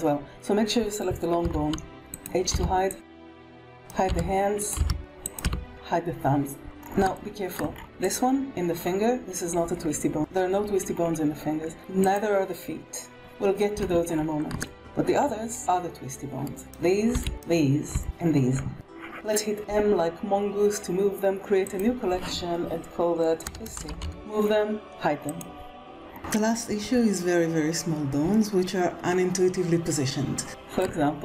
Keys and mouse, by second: 1.3 h, 2.1 click, 2.4-5.3 typing, 3.4 drag, 3.5 click, 3.7 click, 7.0-7.4 shift+middle drag, 11.5 alt+a, 13.5 KP_1, 13.8 alt+a, 14.5 shift+click, 16.6 b, 17.0 b, 17.4 b, 19.5 m, 25.1 click, 26.1 shift+middle click, 26.1 shift+KP_1, 29.3-29.7 shift+middle drag, 30.4 shift+middle drag.